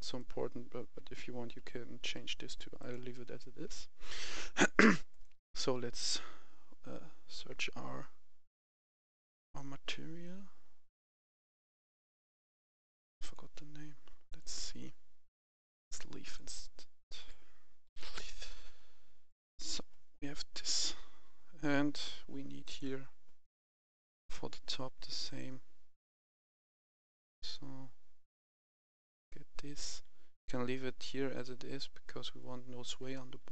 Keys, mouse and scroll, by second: 0.0 right click, 0.1 a, 0.5 a, 0.8 d, 1.8 s, 2.6 click, 3.7-4.9 scroll up 1, 4.9-6.0 drag, 6.2-7.3 scroll down 1, 9.5-11.1 scroll up 1, 13.1 click, 17.7 typing, 19.1 click, 26.0-26.5 scroll down 2, 27.2 click, 33.0-33.5 right drag, 33.3 w, 33.3 a.